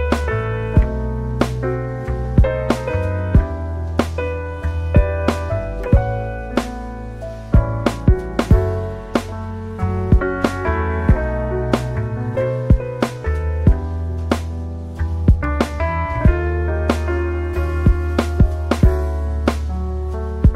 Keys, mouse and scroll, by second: 0.3 drag, 0.3-1.4 typing, 2.3 drag, 2.6 typing, 2.9 drag, 4.0 typing, 5.2 click, 5.7-6.2 drag, 7.5-7.9 typing.